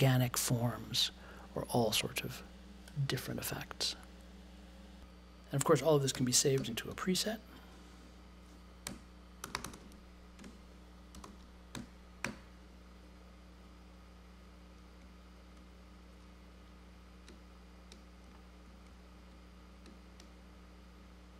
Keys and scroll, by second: 5.0-7.5 typing, 8.8-11.7 typing, 12.2 super+j.